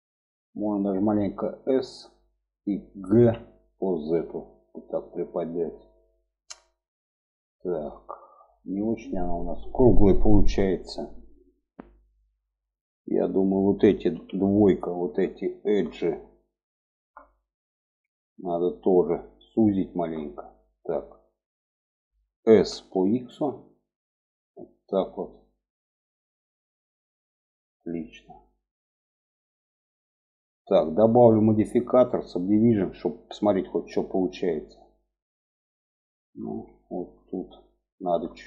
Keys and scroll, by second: 0.9 s, 2.7 g, 13.4 2, 21.8 s.